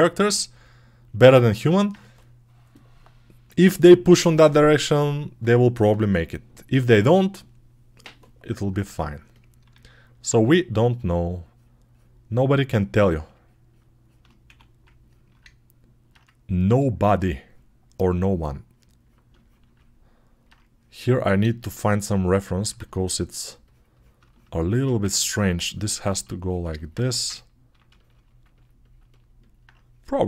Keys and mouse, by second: 9.7 alt+q, 10.2 1, 12.6-15.7 right drag, 14.3 1, 15.7-19.8 alt+middle drag, 19.9-21.7 alt+drag, 21.7-26.2 ctrl+right drag, 22.5 2, 24.8 1, 26.2-30.2 drag, 26.9 1.